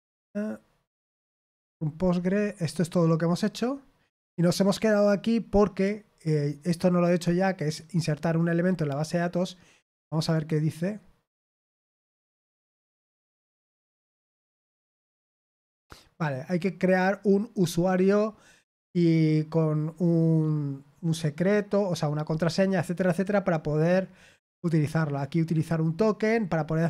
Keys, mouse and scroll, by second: 0.7-2.8 scroll down 6, 9.9 click, 18.6 scroll down 1, 22.5-24.3 scroll down 3, 25.8-26.8 scroll down 6.